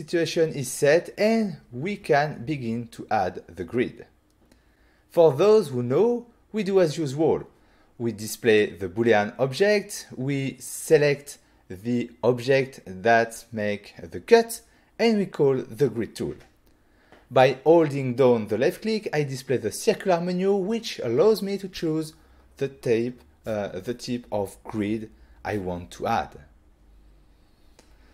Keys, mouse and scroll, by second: 9.3 f, 14.0 click, 16.5 click, 17.4 shift+middle click, 19.1-19.4 scroll down 1, 20.7 f, 22.9 click, 24.4 click, 25.7 click.